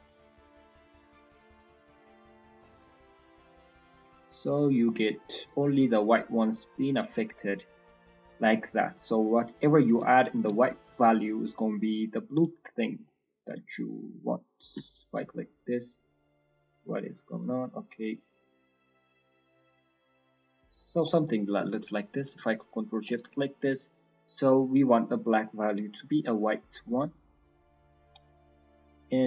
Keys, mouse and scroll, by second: 0.2 click, 5.5 scroll down 1, 5.6 middle click, 5.9-6.3 scroll up 1, 7.2 click, 7.2-7.7 scroll up 1, 8.8 middle click, 9.0-9.5 scroll up 1, 9.6 middle click, 10.3 ctrl+shift+click, 11.1 click, 12.7 scroll down 3, 13.0 middle click, 13.3 scroll up 2, 14.9 ctrl+shift+click, 15.2 middle click, 15.5-16.0 scroll up 3, 16.3 click, 18.2 click, 19.0 click, 20.0 click, 21.2 middle click, 22.0 ctrl+shift+click, 22.2 ctrl+shift+click, 23.0 middle click, 24.5 click, 26.3-26.8 scroll down 1, 26.8 middle click, 27.4 click, 28.2 middle click, 29.1 click.